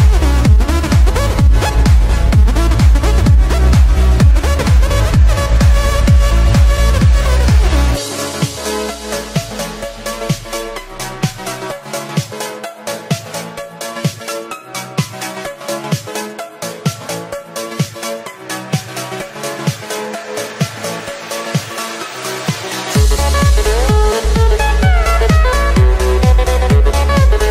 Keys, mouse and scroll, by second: 3.8 click, 4.6 click, 5.7 click, 7.2 click, 8.2-11.8 drag, 15.6 click, 17.9 click, 19.0-21.6 drag, 22.3-24.9 drag, 24.9 scroll up 3, 25.3 s.